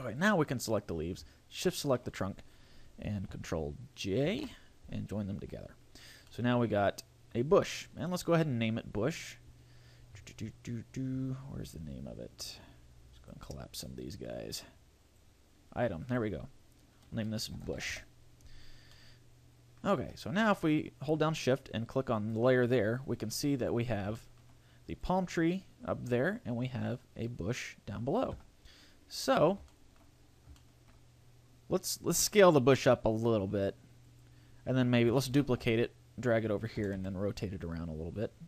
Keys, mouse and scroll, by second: 0.2 right click, 1.7 shift+right click, 5.4 ctrl+j, 5.4 a, 5.6-6.0 scroll down 2, 6.0 right click, 6.3 middle click, 8.1-10.1 scroll down 14, 10.1-11.1 scroll up 8, 11.3-12.9 scroll up 13, 13.1 click, 13.9 click, 15.0 click, 16.0 click, 18.9 middle click, 20.0 a, 22.1 shift+click, 22.8-23.3 scroll down 5, 23.3 middle click, 23.8 scroll down 2, 24.1 shift+middle click, 24.9 right click, 25.9 click, 26.8 click, 28.3 KP_0, 29.1-29.7 scroll down 5, 29.7 shift+middle click, 30.1 scroll up 1, 30.5 shift+middle click, 32.1 s, 34.2 click, 35.3 shift+d, 36.7 click, 36.8 r.